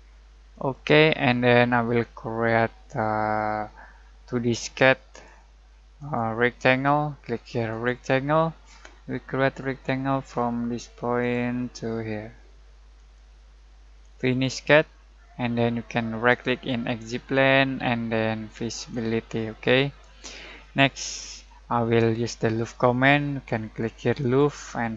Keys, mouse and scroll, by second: 2.7 typing, 5.1 alt+click, 5.1 typing, 8.3 alt+middle click, 8.9 alt+scroll down 1, 11.2 alt+click, 16.5 alt+right click, 18.7 alt+click, 19.3-23.8 alt+middle drag, 24.2 alt+click.